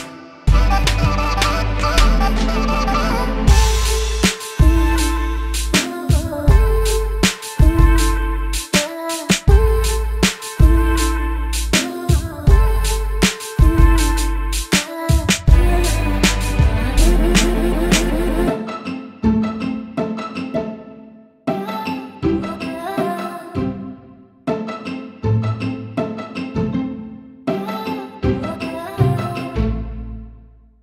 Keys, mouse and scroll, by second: 0.7-1.8 drag, 1.9-7.4 alt+drag, 7.5 Tab, 8.1 alt+click, 8.5 click, 8.7-9.3 alt+drag, 10.6 click, 12.3 click, 13.6-14.8 alt+drag, 15.5 click, 16.0-19.9 alt+drag, 22.1 alt+drag, 22.3 alt+middle drag, 22.6 alt+click, 22.9 alt+middle drag, 23.1 alt+drag, 26.5-27.4 drag, 28.6 click, 29.5 click, 30.2 click, 30.4-30.8 drag.